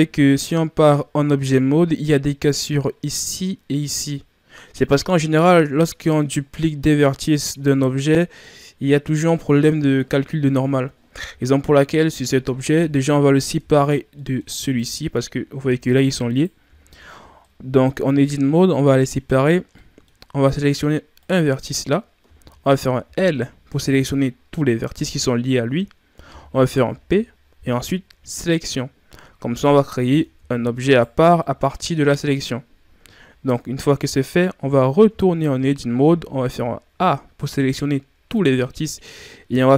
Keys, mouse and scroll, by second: 5.2-11.2 middle drag, 11.2 Tab, 12.0-13.5 middle drag, 13.5 Tab, 13.9 scroll up 1, 14.0 scroll down 2, 14.1-14.6 middle drag, 14.6 right click, 15.6 g, 16.6 Tab, 17.4-20.3 middle drag, 20.3-20.9 scroll up 2, 21.1 right click, 23.0 l, 29.4 scroll down 2, 29.6 middle click, 30.3 Tab, 30.8 right click, 31.3-34.9 middle drag, 34.9 Tab, 36.8 a.